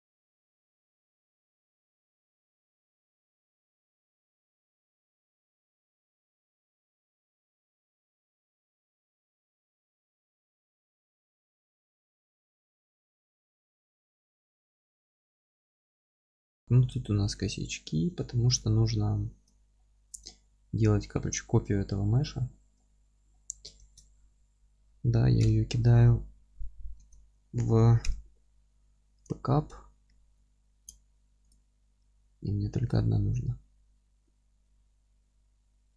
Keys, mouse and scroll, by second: 2.8-3.8 middle drag, 3.8 scroll down 2, 3.9 alt+q, 4.3 scroll up 2, 4.5 F3, 4.8-5.2 scroll up 2, 5.2-16.9 middle drag, 5.4 F3, 5.6-6.3 scroll down 2, 6.3-7.1 scroll down 1, 7.1 ctrl+`, 13.5 scroll up 2, 14.0 scroll down 2, 14.5 alt+q, 15.2 scroll down 1, 15.9-16.5 scroll up 3, 16.9 click, 17.3 Tab, 17.7 scroll up 1, 17.8-31.5 middle drag, 18.1 Tab, 18.3 scroll down 1, 19.5-20.3 scroll down 2, 20.5 alt+q, 22.7 scroll up 2, 23.0-23.3 scroll down 2, 23.8 shift+d, 24.4 Escape, 27.0 alt+q, 30.5 ctrl+z, 31.5 click, 32.0 g.